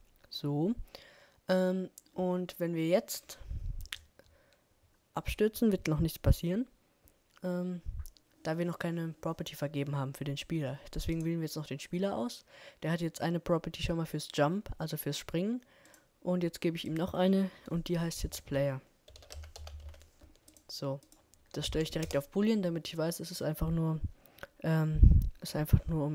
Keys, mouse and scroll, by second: 2.5 middle click, 9.2-11.7 right drag, 21.6 right click, 22.4 right click, 24.0 right click, 24.7 click.